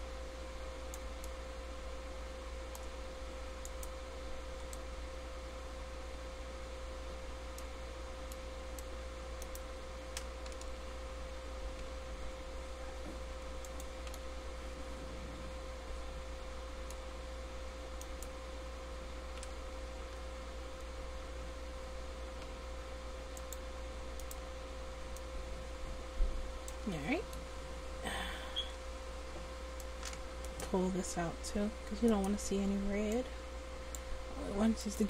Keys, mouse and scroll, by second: 3.8-5.9 middle drag, 11.0 g, 18.2-19.9 right drag, 19.6 g, 21.9 middle click, 24.4 right click, 25.4-26.9 middle drag, 26.9 click, 29.8-34.1 drag.